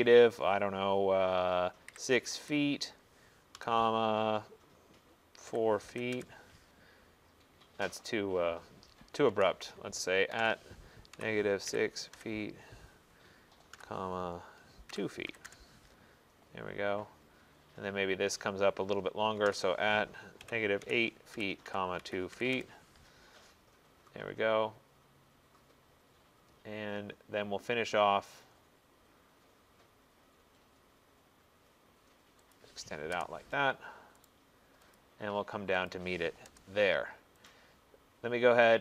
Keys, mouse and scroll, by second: 1.9-2.4 typing, 3.6 ,, 5.3-6.0 typing, 6.2 Return, 9.4 ctrl+z, 10.4-12.2 typing, 13.8-15.5 typing, 17.5 middle click, 18.6-22.6 typing, 18.8-24.2 middle drag, 24.3-25.0 typing, 26.0 middle click, 32.6 click, 33.2 Return, 34.3 right click, 35.0 click, 35.9 click, 36.5 Return, 37.5 click.